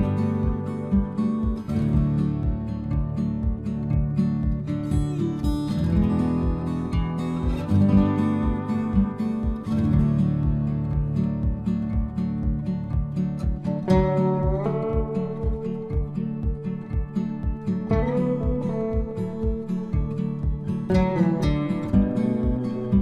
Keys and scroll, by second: 4.8 ctrl+v.